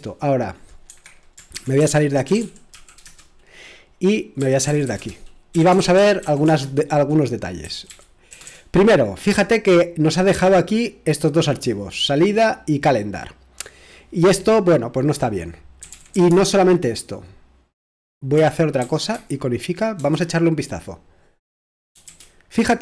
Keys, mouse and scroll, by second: 0.9 Escape, 1.3-8.3 typing, 11.5-14.0 drag, 15.5-16.8 typing, 18.3-18.8 typing, 20.0 typing, 22.1 typing.